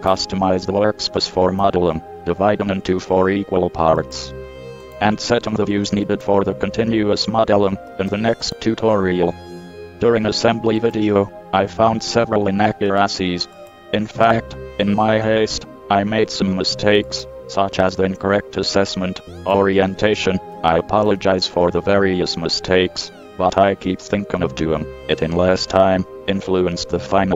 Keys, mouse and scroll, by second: 1.8 n, 8.1 right click, 8.9 click, 18.3-20.2 drag, 21.3 KP_7, 25.7 n, 26.8 n.